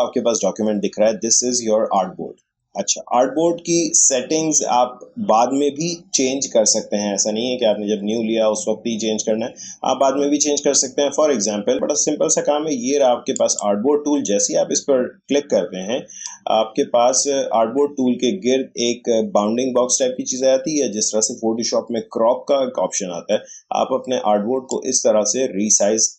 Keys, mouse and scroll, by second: 13.3 click, 24.7-26.1 drag.